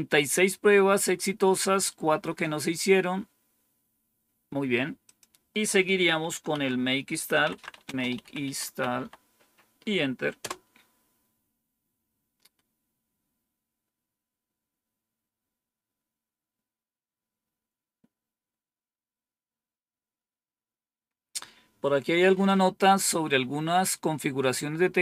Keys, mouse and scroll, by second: 5.0 click, 6.1 Up, 6.4 Down, 7.0-9.2 typing, 10.3 typing, 13.4-14.2 scroll down 2.